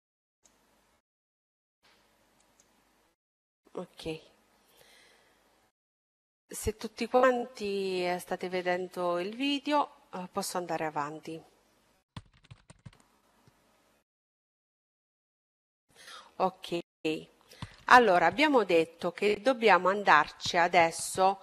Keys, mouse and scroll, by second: 16.4-19.5 middle drag.